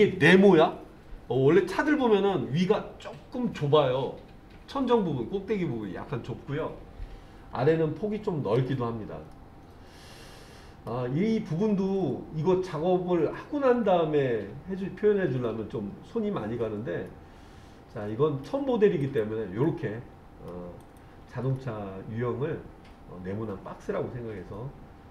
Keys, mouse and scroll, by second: 9.3-10.9 middle drag, 17.1-18.5 middle drag, 19.0 click, 19.7 middle click, 20.8 click, 21.6-25.1 middle drag.